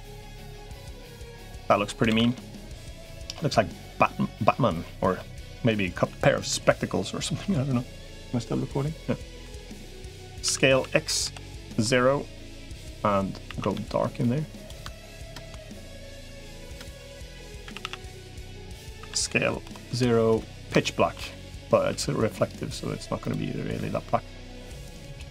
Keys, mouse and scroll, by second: 0.4 middle click, 1.3 middle click, 1.9 ctrl+s, 2.1-3.4 middle drag, 3.8 middle click, 5.0 middle click, 9.2 middle click, 10.3 s, 11.6 middle click, 13.3 a, 13.5 g, 15.1 ctrl+KP_Add, 16.5 ctrl+KP_Add, 17.5 a, 17.7 a, 17.9 b, 18.9 s, 20.6 shift+middle click, 21.7 g, 25.1 click.